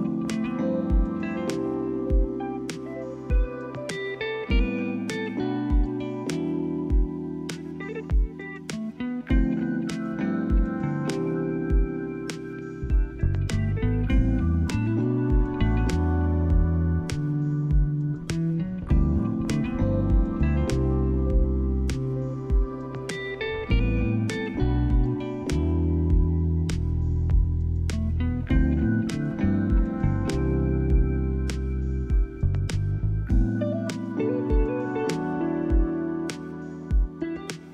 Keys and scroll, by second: 13.2 ctrl+=.